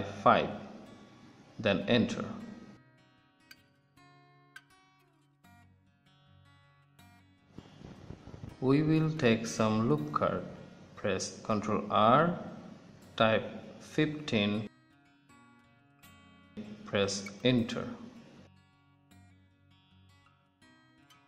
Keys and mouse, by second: 11.7 ctrl+r, 20.4 middle click, 21.1 click.